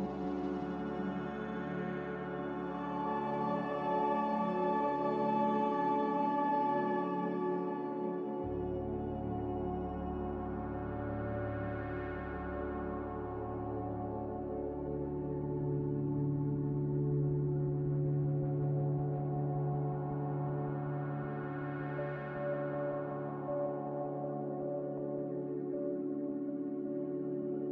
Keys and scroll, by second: 0.1 z, 2.1 ctrl+c, 5.1 ctrl+v, 5.6 ctrl+c, 7.2 ctrl+v, 10.0 m, 16.9 ctrl+z, 25.3 b.